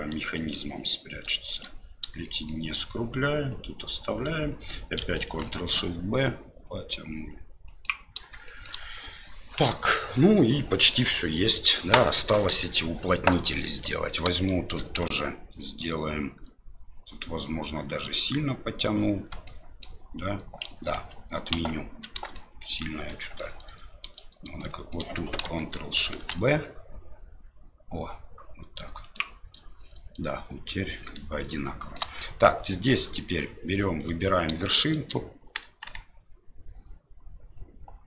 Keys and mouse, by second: 0.5 ctrl+click, 2.2 shift+middle click, 8.4 shift+middle click, 13.8 right click, 14.5 shift+middle click, 19.4 shift+middle click, 20.9 ctrl+z, 21.5 ctrl+z, 22.3 middle click, 23.0 middle click, 24.7 shift+middle click, 26.1 ctrl+shift+b, 31.8 shift+middle click, 34.0 right click, 34.6 shift+middle click, 35.6 KP_1.